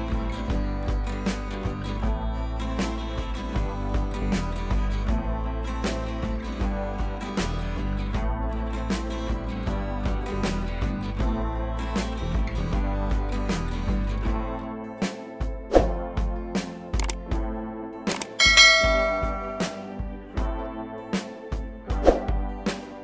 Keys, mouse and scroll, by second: 4.2-11.1 drag, 16.8-18.2 drag, 21.1-23.0 drag.